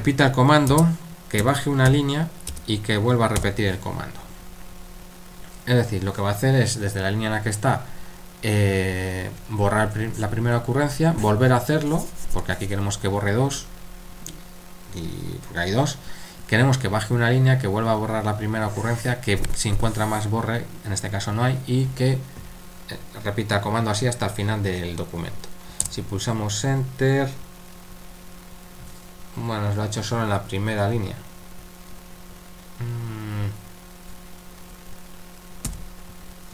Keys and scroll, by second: 1.4-1.9 typing, 3.4 typing, 25.8 Return, 35.7 typing.